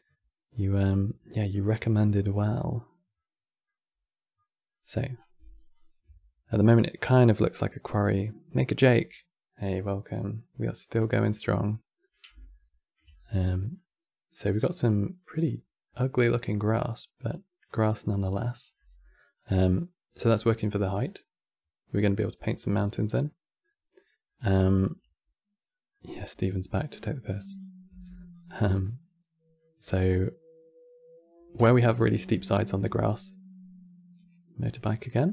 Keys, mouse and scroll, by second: 0.0-0.4 scroll down 4, 0.6-4.9 middle drag, 4.9-5.8 scroll down 3, 5.8 ctrl+shift+click, 10.9-18.3 middle drag, 18.3 scroll down 2, 18.5 middle click, 19.1 click, 20.0 scroll down 1, 20.2 middle click, 20.7-21.1 scroll down 2, 22.3-23.3 middle drag, 23.3-23.6 scroll down 2, 23.6-27.0 middle drag, 27.0 click, 27.6 g, 28.5-30.9 middle drag, 30.9 scroll up 4, 31.4-31.9 shift+middle drag, 31.9-32.2 scroll up 4, 34.9-35.3 middle drag.